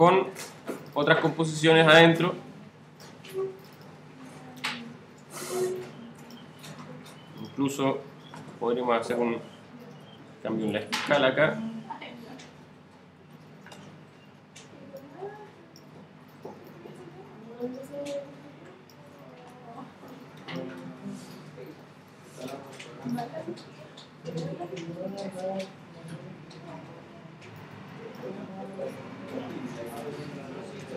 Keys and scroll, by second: 10.0 shift+super+s, 11.5 shift+super+Home, 12.0 shift+Home, 13.3 alt+shift+s, 21.9 alt+c, 23.6 alt+v, 28.6 alt+c.